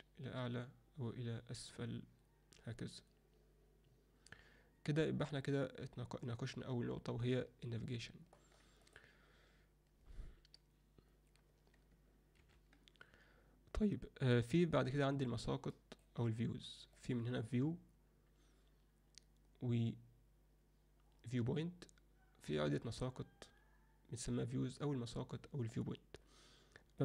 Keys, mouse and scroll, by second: 8.8 click, 12.4 ctrl+F9, 12.6 ctrl+F10, 15.8 alt+middle click, 17.0-25.7 drag.